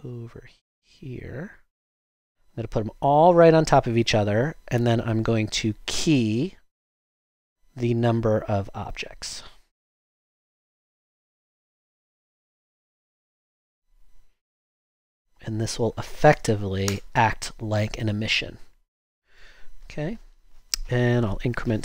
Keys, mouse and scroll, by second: 16.3 0, 16.8 0, 16.9 Return.